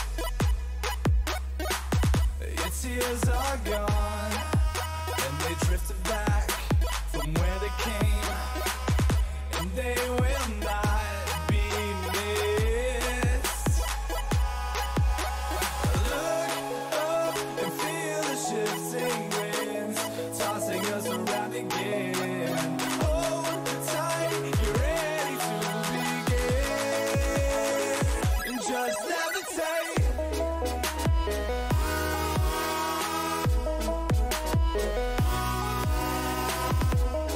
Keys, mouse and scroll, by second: 1.6 a, 2.2-4.8 middle drag, 4.3 b, 5.7 g, 7.7 a, 7.9 middle click, 10.9 ctrl+r, 12.8 a, 13.5-14.8 middle drag, 15.8 b, 16.0-17.6 middle drag, 17.6 g, 21.5-24.9 middle drag, 23.5 a, 24.9 b, 26.1 middle click, 26.1 click, 28.0 g, 28.2 click, 30.3-35.2 middle drag, 32.0 a.